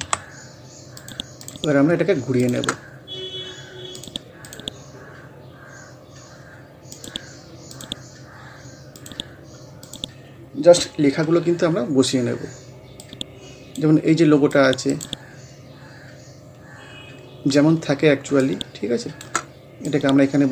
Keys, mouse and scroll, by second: 0.0 t, 1.0 click, 3.0 scroll down 1, 4.0 click, 13.0-14.9 drag, 14.9 right click, 16.0 scroll down 1, 16.6-18.3 scroll up 1, 18.4 shift+click, 18.5-20.5 shift+drag.